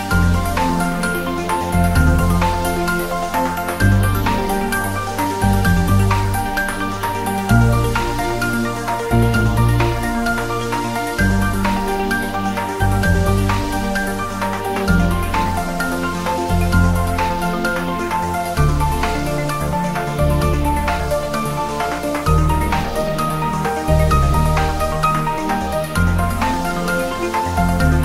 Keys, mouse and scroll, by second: 0.0 scroll up 1, 0.8 Tab, 1.3 ctrl+3, 1.5 scroll up 1, 1.7 Tab, 2.1 ctrl+r, 2.2 click, 3.1 scroll up 1, 3.2 Tab, 3.9 ctrl+r, 4.1 click, 4.7 Tab, 4.8-5.3 scroll down 1, 5.4-5.9 scroll up 1, 5.9 click, 7.9 click, 8.2 scroll down 1, 8.9 click, 9.4 s, 10.4 click, 11.9-13.0 drag, 13.0 scroll down 1, 13.5-15.1 drag, 15.1 scroll down 1, 15.9 shift+d, 17.4-19.1 typing, 17.4 click, 19.1 click, 19.6 scroll down 1, 20.6 s, 21.5 click, 22.2-22.7 scroll down 1, 22.7 g, 23.1 click, 23.3 s, 24.1 click, 24.2 s, 25.0 click, 26.0 scroll down 1, 26.2 click, 27.1 s, 27.5 click.